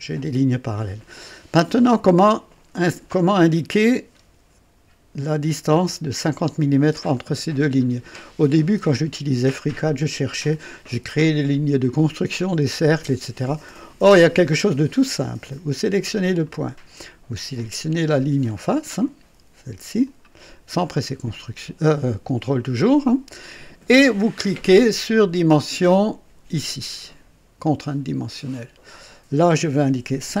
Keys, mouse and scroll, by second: 7.7 scroll up 2, 8.8 right click, 16.2 click, 20.0 click, 27.8 click, 30.2 KP_5.